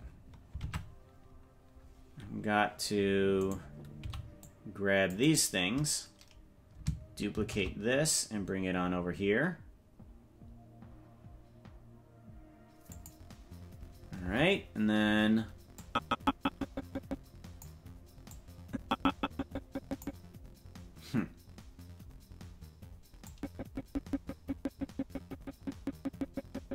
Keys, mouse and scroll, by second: 1.0 ctrl+Tab, 2.9-3.3 scroll up 5, 3.4 right click, 4.0 c, 7.5 shift+d, 15.9-17.9 drag, 18.7-20.3 drag, 23.4-26.7 drag.